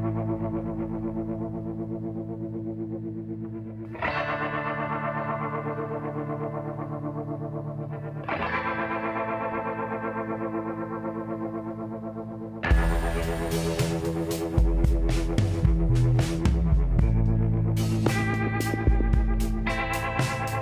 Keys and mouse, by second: 0.3-2.9 drag, 2.1 s, 4.7 s, 7.1 ctrl+z, 8.6-10.3 drag, 10.7 s, 13.3-15.1 drag, 15.1-17.3 middle drag, 16.7 s, 19.8 l.